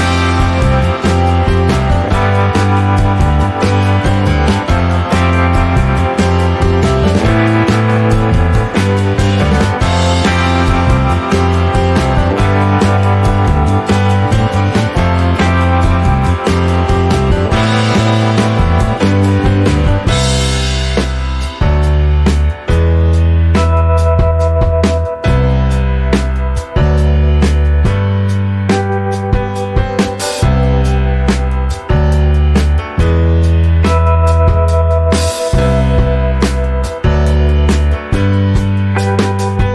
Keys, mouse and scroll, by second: 1.8 scroll down 4, 2.0-4.5 middle drag, 4.5-4.9 scroll up 1, 4.9-6.1 middle drag, 6.1-10.0 drag, 10.7 click, 11.0 middle click, 11.2-12.1 scroll up 2, 12.1 click, 16.0 click, 16.7-20.1 drag, 20.6-24.4 middle drag, 24.4 ctrl+s, 26.8-28.4 middle drag, 28.4-29.6 drag, 29.6 right click, 31.8-32.8 right drag, 32.9-34.7 right drag, 34.7 click, 34.8 scroll down 1, 35.0 middle click, 35.4-35.8 scroll down 2, 35.8-37.0 middle drag, 37.0 click, 37.1-37.5 scroll up 1, 37.5-39.7 middle drag.